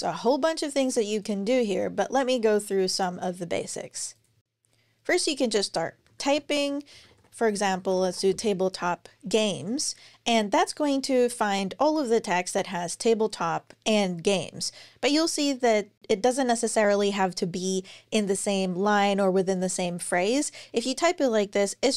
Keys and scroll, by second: 5.5-8.0 typing, 9.9 typing.